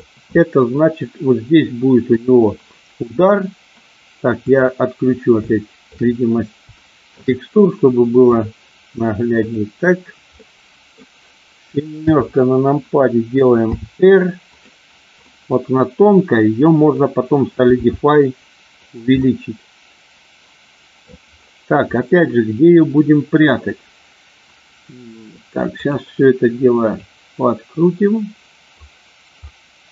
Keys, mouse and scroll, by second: 0.7-2.3 middle drag, 4.6 click, 5.5 shift+middle click, 6.8 shift+middle click, 8.2 click, 9.4 click, 10.3 middle click, 12.0 KP_7, 13.6 r, 14.3-14.7 drag, 15.2-17.0 middle drag, 17.7 g, 18.7 click, 19.2 scroll up 1, 19.3-20.9 middle drag, 22.1-23.5 middle drag, 25.7 click, 26.8-28.7 drag, 29.5-29.9 middle drag.